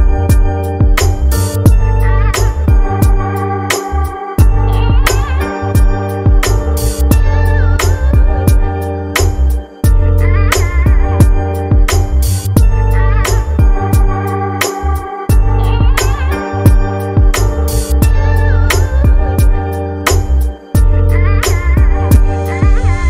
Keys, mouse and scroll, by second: 2.3 click, 5.9 click, 8.5 click, 9.9 scroll up 2, 10.7 scroll up 1, 15.6-17.2 scroll down 1, 19.0 scroll down 2.